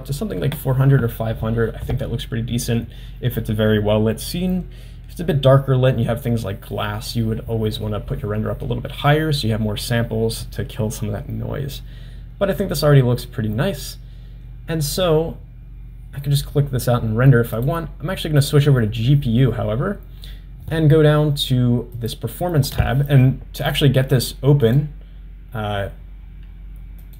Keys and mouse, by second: 17.7-18.9 drag, 22.0 click, 23.7-24.9 drag.